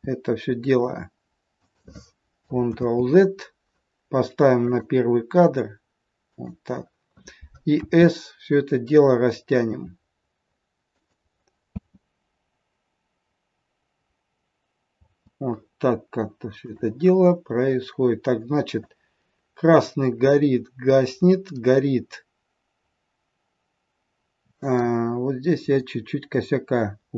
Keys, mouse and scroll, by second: 2.7 ctrl+z, 4.6 click, 6.2 click, 7.8 s, 11.8 space, 15.0 space, 16.6 click, 18.8 click.